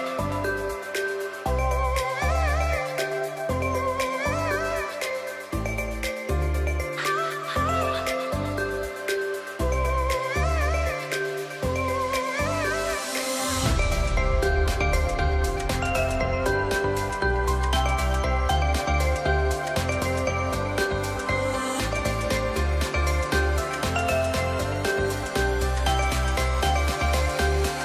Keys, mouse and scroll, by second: 6.9-12.1 drag, 13.5 ctrl+t, 15.0-17.2 drag, 22.7 Return, 23.8 click.